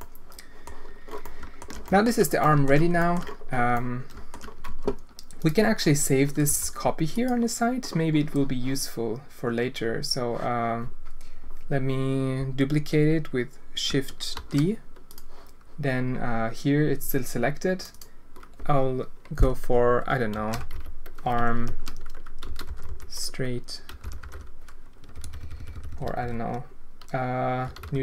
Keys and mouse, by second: 1.2 alt+shift+middle click, 1.8 alt+shift+middle click, 2.4 alt+shift+click, 3.0 shift+click, 3.7 click, 4.6 Tab, 6.4 g, 14.3 shift+d, 17.9-28.0 drag, 25.2 BackSpace, 25.4 BackSpace, 25.9 BackSpace.